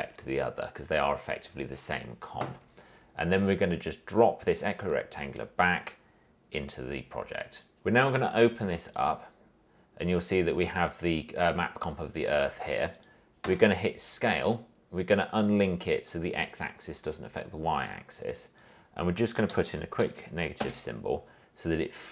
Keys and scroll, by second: 13.6 s, 19.7 Left, 20.8 Return.